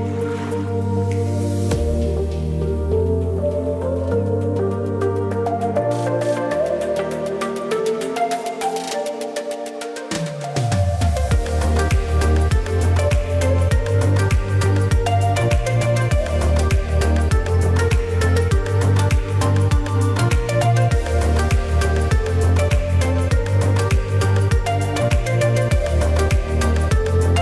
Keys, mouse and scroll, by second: 5.5-12.5 drag, 12.5 ctrl+z, 13.1-27.4 drag.